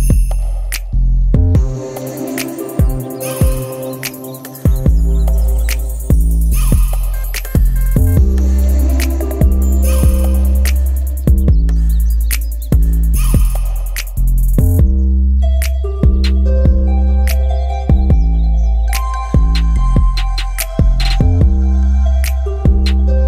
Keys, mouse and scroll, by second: 0.4 BackSpace, 0.8 KP_0, 1.6 KP_Enter, 3.2 click, 9.6-10.5 ctrl+scroll up 4, 11.6 ctrl+click, 12.4 ctrl+middle click, 13.3 ctrl+middle click, 14.2 click, 14.9 click, 17.0 click, 18.3 Delete, 21.3 click, 22.3 click, 23.0-23.2 ctrl+shift+drag.